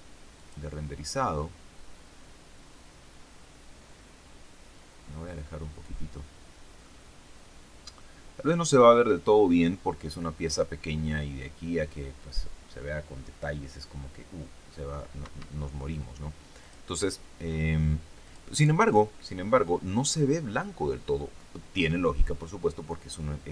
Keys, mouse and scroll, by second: 0.3 click, 4.4-5.0 scroll down 1, 6.8-7.9 drag, 15.1 Escape, 16.6 click, 18.1 click, 19.6-20.0 scroll up 1, 20.6-20.9 scroll down 1.